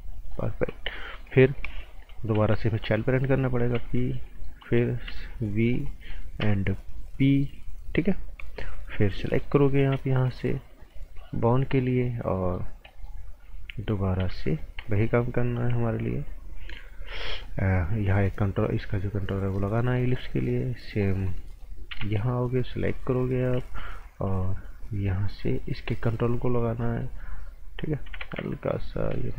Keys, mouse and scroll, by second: 0.5-1.2 scroll up 2, 0.7 right click, 1.2 right click, 2.3 b, 2.7 click, 3.0 right click, 3.7 p, 4.1 click, 4.4 right click, 5.0 b, 5.6 click, 5.8 right click, 6.4 p, 7.1 click, 7.4 right click, 8.9 z, 9.3 scroll up 1, 9.4 right click, 9.8 a, 10.0 scroll up 1, 10.2 right click, 10.9 scroll up 1, 11.3 right click, 12.7 scroll down 1, 12.9 right click, 13.2-14.2 scroll up 1, 14.2 b, 14.5 click, 14.8 a, 16.9 right click, 17.8 click, 19.8 right click, 21.9 b, 23.2 click, 24.2 a, 25.1 click, 27.0 right click, 28.2 ctrl+z, 28.4 right click, 28.8 scroll up 1, 29.1 right click.